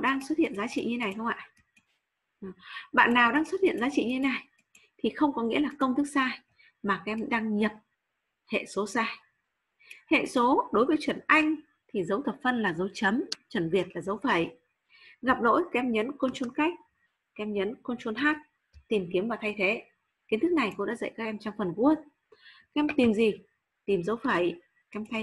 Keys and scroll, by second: 16.2 ctrl+space.